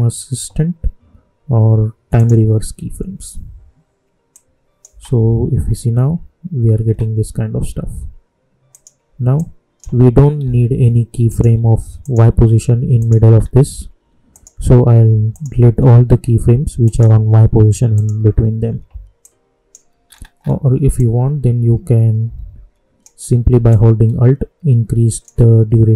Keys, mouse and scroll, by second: 2.1 click, 4.8 space, 6.8 space, 8.6-11.2 drag, 13.3 scroll down 1, 14.3 click, 15.7 scroll down 1, 16.8 click, 20.0 scroll up 1, 20.9-23.6 drag.